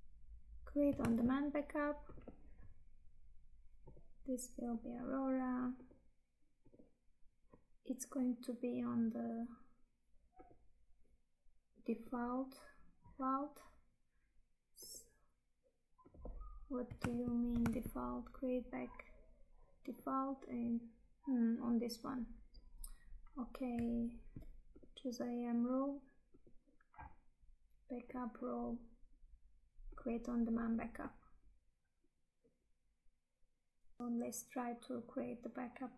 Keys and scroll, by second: 1.1 Tab, 17.3 Tab, 34.0 Tab.